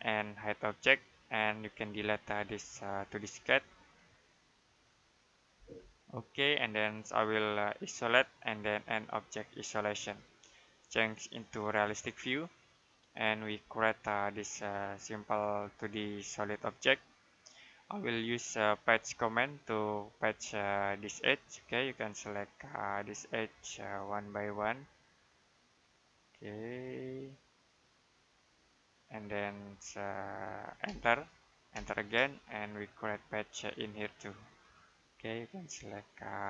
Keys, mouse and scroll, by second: 5.4 Delete, 6.6 right click, 7.9 click, 13.8 middle click, 19.2 click, 30.7 space, 32.3 middle click, 34.4 click.